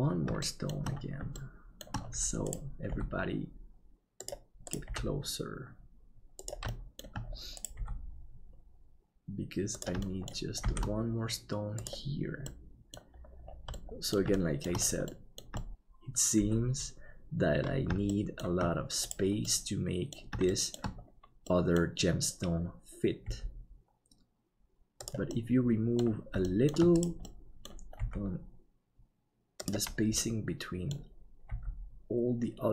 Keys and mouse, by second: 0.4 shift+middle click, 1.3 shift+middle click, 2.9 g, 4.9 g, 6.8 middle click, 10.1 shift+middle click, 10.6 shift+d, 12.6 middle click, 13.8 middle click, 14.4 shift+middle click, 15.9 shift+middle click, 16.4 KP_7, 18.2 shift+middle click, 19.4 middle click, 20.5 shift+middle click, 21.5 middle click, 23.3 g, 25.3 middle click, 26.5 shift+middle click, 27.2 middle click, 28.0 g, 30.2 middle click, 31.5 g.